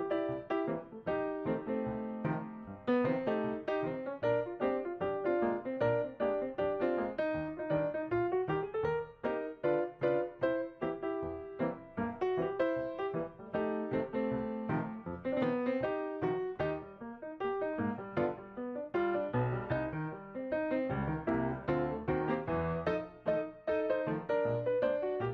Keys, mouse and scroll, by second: 5.6 double click, 14.0 double click.